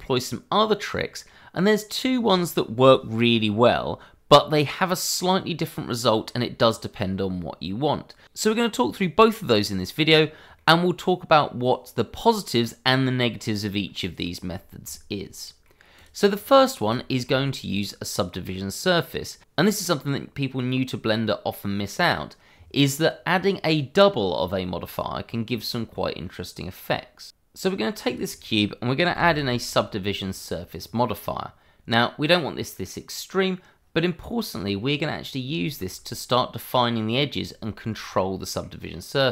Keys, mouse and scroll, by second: 0.9 middle click, 7.4-7.8 scroll up 1, 7.8 middle click, 10.1-10.7 scroll down 1, 10.7 shift+middle click, 10.8 middle click, 11.1 scroll up 1, 12.4 scroll down 1, 12.7 middle click, 14.6 scroll up 1, 15.1 middle click, 15.2 shift+middle click, 15.4 middle click, 15.9 click, 16.3 scroll up 1, 16.9 shift+middle click, 17.5 scroll down 1, 17.8 middle click, 28.0 click, 29.0 s, 29.1 u, 30.7 click, 34.8-35.5 scroll down 1, 35.6 shift+middle click, 37.0-37.5 scroll up 1, 37.6 shift+middle click, 38.3 middle click.